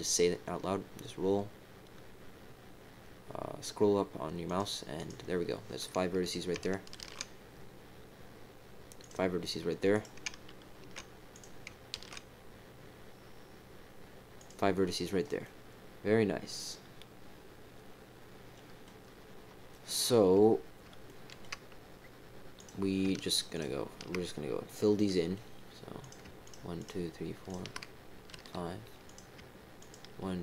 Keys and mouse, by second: 4.9 click, 6.2 click, 6.9 ctrl+r, 9.9 click, 11.3 click, 12.2 ctrl+r, 15.4-18.8 drag, 19.7 click, 21.0 shift+middle click, 22.5 click, 23.5 shift+click, 24.9 click, 26.0 click, 26.4 shift+click, 26.7 shift+click, 28.3 f, 29.0 click, 29.8 shift+click.